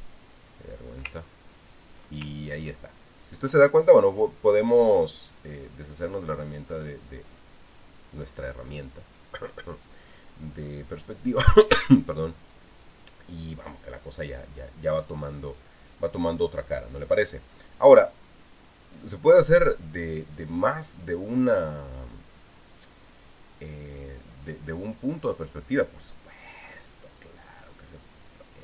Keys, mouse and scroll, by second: 2.0-3.2 ctrl+scroll down 2, 3.2 ctrl+scroll up 2, 4.0 ctrl+scroll down 2, 6.1 click, 17.5 click, 19.7 click, 24.5 click, 26.1 click, 27.5 click.